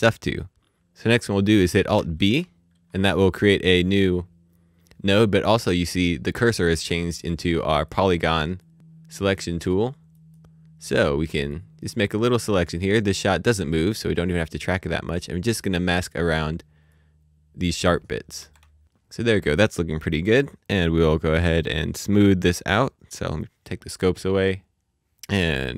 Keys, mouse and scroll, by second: 0.4 click, 1.5 click, 1.9 b, 10.6 click, 16.9 click, 23.4 click, 25.2 click.